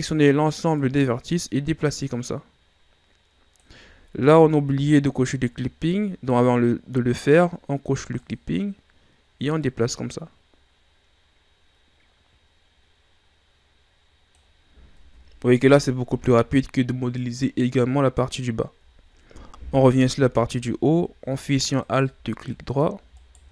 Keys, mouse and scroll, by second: 0.7-3.7 drag, 4.1 ctrl+z, 8.1 click, 9.6-12.6 drag, 14.9 Tab, 18.8-19.9 shift+scroll up 8, 19.9 Tab, 20.4 scroll up 2, 21.7 alt+right click, 22.4 middle click, 23.1 alt+right click.